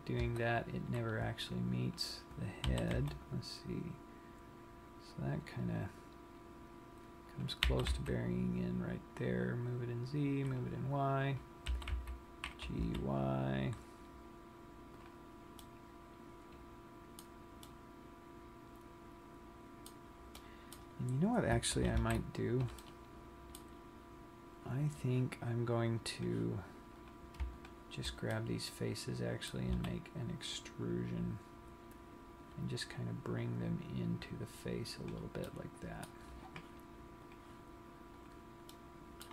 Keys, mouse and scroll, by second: 2.0 click, 2.7 g, 7.5 click, 7.8 g, 10.7 click, 11.5 click, 11.8 g, 15.2 click, 15.6 scroll up 1, 15.9 middle click, 17.9 middle click, 20.4 middle click, 22.0 super+z, 22.8 middle click, 26.3 click, 27.2 click, 27.8 shift+click, 28.5 shift+click, 28.5 middle click, 30.1 e, 35.3 click, 35.7 middle click, 37.5 click, 38.4 click, 38.9 middle click.